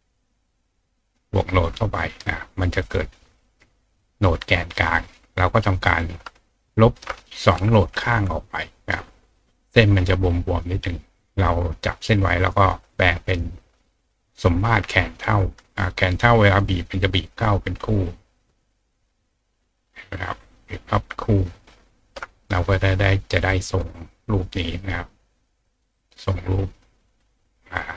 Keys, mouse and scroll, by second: 2.6 click, 4.9-6.1 drag, 6.7 shift+drag, 10.5 click, 14.6 click, 16.1-21.5 shift+drag, 23.4 click, 24.8 click, 26.0-27.9 drag.